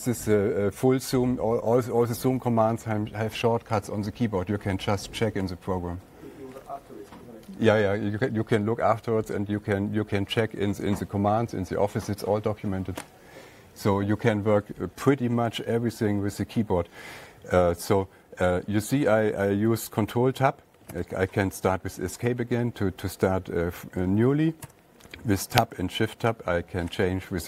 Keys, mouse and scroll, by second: 21.3 Escape, 25.1 Tab, 26.5 Tab.